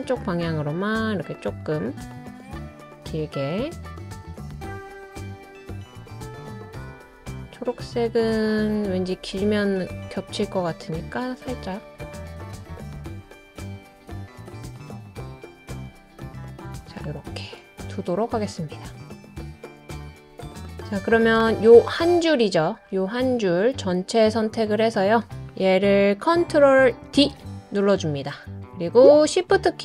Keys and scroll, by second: 27.0 super+d.